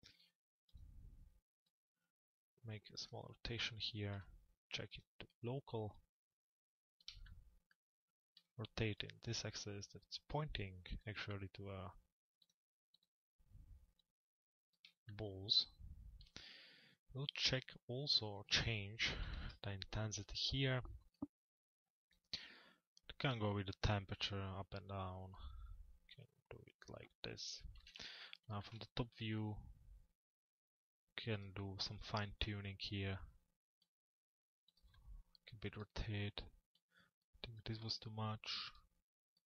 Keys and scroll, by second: 27.4 t, 28.0 z.